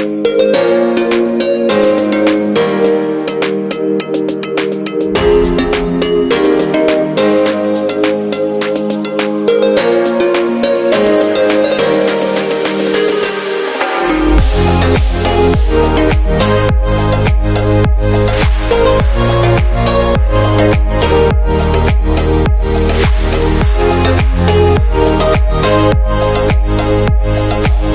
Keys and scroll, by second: 6.1 super+d, 7.8-8.9 typing, 14.1 typing, 17.1-18.6 typing, 20.8-21.1 typing.